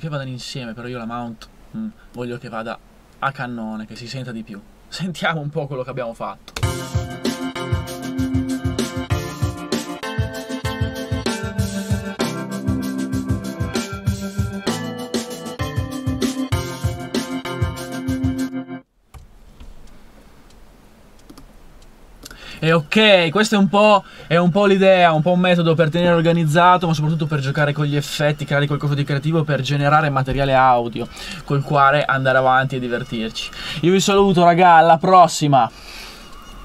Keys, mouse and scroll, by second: 6.6-8.3 drag, 18.4 space, 19.2 2.